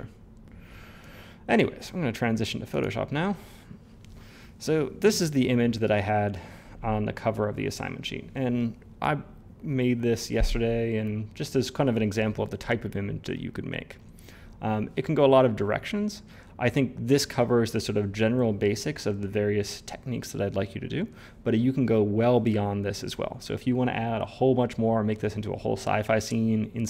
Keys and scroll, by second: 1.0 Tab.